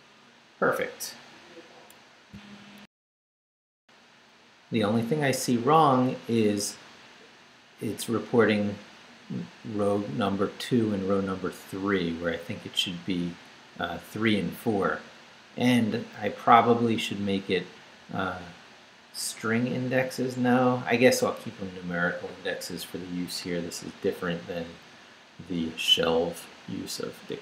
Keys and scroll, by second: 2.8 alt+shift+super+z.